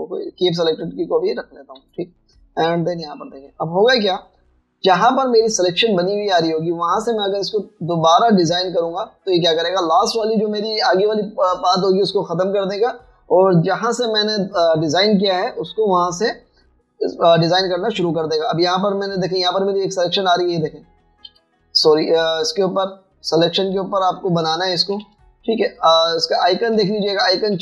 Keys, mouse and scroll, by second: 0.3 double click, 2.8 b, 5.4-6.2 alt+scroll up 2, 5.8 space, 22.3 v, 24.4 double click, 24.8 a, 26.1 b.